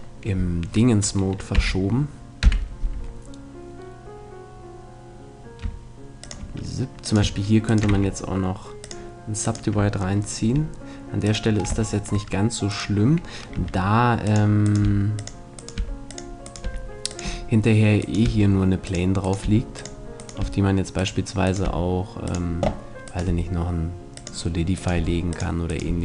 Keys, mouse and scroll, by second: 1.6 KP_5, 2.4 KP_5, 2.9 s, 6.4-8.1 drag, 7.0-11.2 right drag, 7.9 w, 8.1 middle click, 10.4 g, 11.4-12.7 drag, 13.6 g, 14.8 g, 15.8 g, 16.6 g, 18.2 g, 19.4 g, 20.4 g, 21.6 g, 23.2 g, 25.0 g, 25.9 g.